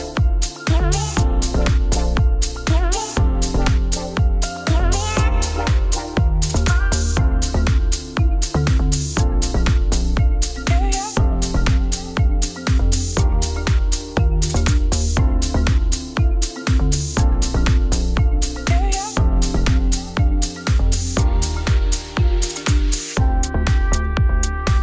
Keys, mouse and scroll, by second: 0.3 middle click, 0.7 ctrl+s, 2.6 shift+s, 3.3 shift+s, 4.5 click, 5.0 h, 5.4 click, 5.6 shift+a, 6.4 Tab, 7.7-9.0 middle drag, 10.5 scroll up 1, 10.7-11.9 middle drag, 13.0 2, 13.2 click, 14.0 ctrl+r, 16.9 ctrl+r, 17.7 2, 17.9 alt+click, 18.4 e, 19.7 middle click, 20.5 ctrl+z, 21.2 middle click, 21.9 3, 22.0 click, 22.4 click, 22.6 ctrl+click, 22.9 KP_0, 23.3 scroll up 1, 24.2 shift+d.